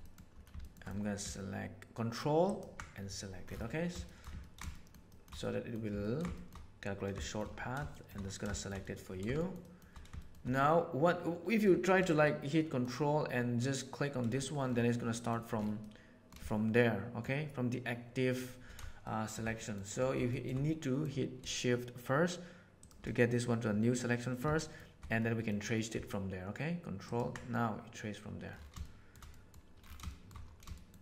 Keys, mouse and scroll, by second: 0.0 middle click, 0.6 shift+middle click, 0.8 middle click, 2.4 ctrl+middle click, 4.0 shift+middle click, 4.4 ctrl+middle click, 4.6 shift+middle click, 5.0 shift+middle click, 5.4 middle click, 6.0 ctrl+middle click, 6.3 shift+middle click, 7.1 shift+middle click, 7.9 shift+middle click, 8.5 shift+middle click, 8.8 middle click, 9.3 shift+middle click, 9.6 shift+middle click, 10.1 shift+middle click, 10.5-11.6 middle drag, 12.2 middle click, 15.1 middle click, 15.8 middle click, 16.4 shift+middle click, 19.0 shift+middle click, 19.6 middle click, 20.3 shift+middle click, 20.6 middle click, 20.6 click, 24.5 shift+middle click, 25.1 middle click, 28.8 shift+middle click, 29.2 middle click, 30.7 shift+middle click.